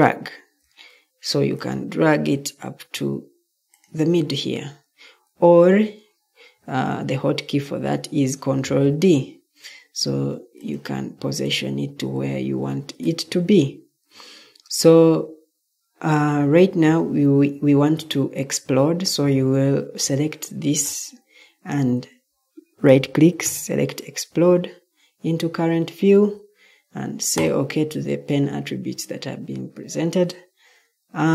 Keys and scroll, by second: 8.6 ctrl+d.